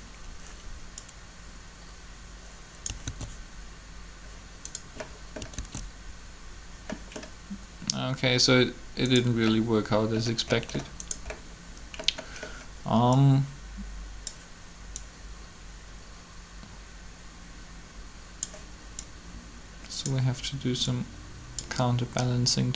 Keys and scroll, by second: 3.0 alt+a, 5.6 alt+a.